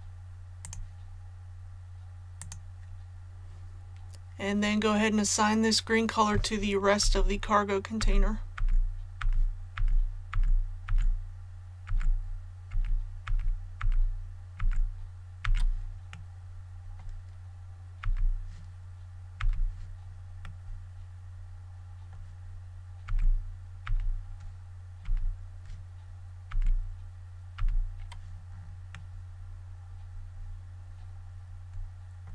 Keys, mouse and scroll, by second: 7.0-12.6 typing, 13.7-15.4 typing, 16.3-17.3 middle drag, 20.4-22.3 middle drag, 23.0-23.8 typing, 25.0 typing, 28.9-32.3 middle drag.